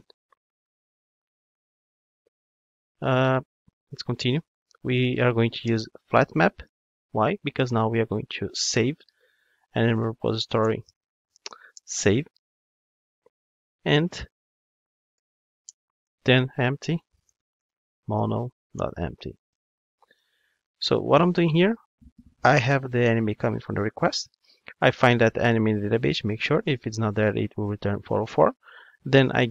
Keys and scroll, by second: 5.7 Return, 10.7 Return.